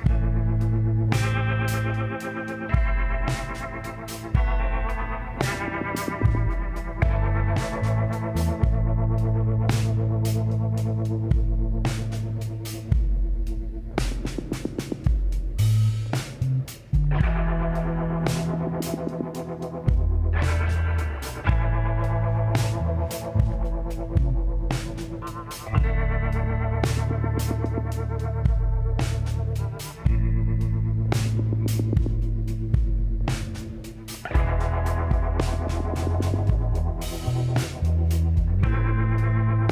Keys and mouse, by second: 1.8-5.0 middle drag, 2.4 s, 6.8 click, 7.8-9.4 middle drag, 8.7 KP_1, 11.1 z, 12.4-14.2 drag, 15.5-17.4 drag, 17.5-19.2 drag, 18.4 l, 19.9 r, 23.7-25.6 drag, 26.5 z, 27.0-28.8 drag, 31.9 KP_7, 33.3 s.